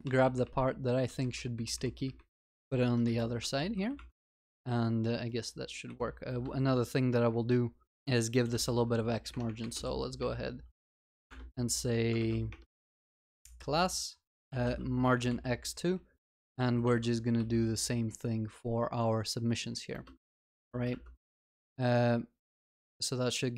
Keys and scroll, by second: 3.0 alt+shift+Up, 3.6 ctrl+s, 4.5 ctrl+s, 12.2 ctrl+BackSpace, 16.4 ctrl+w, 17.4 ctrl+c, 20.2 ctrl+v, 20.6 ctrl+s.